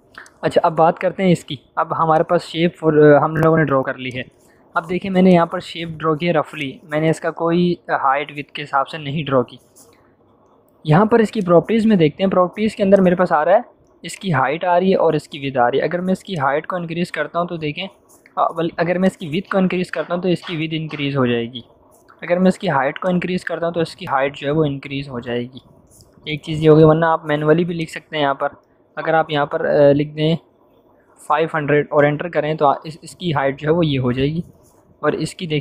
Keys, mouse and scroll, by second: 0.5-0.8 click, 11.3 click, 16.3-18.5 drag, 27.7-28.6 drag, 30.6-31.7 typing, 31.8 Return.